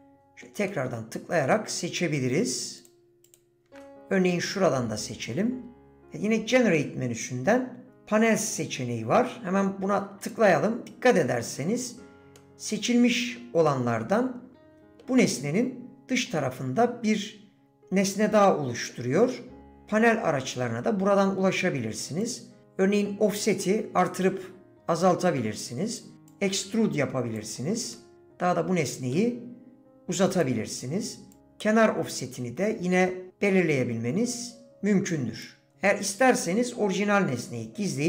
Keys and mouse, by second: 0.2 middle click, 0.7 middle click, 3.2 shift+click, 3.8 middle click, 12.4 middle click, 13.7-15.0 middle drag, 16.4-18.9 middle drag, 22.2-26.0 drag, 26.4-27.5 drag, 27.9-29.1 middle drag, 29.9 click, 31.4-35.4 drag.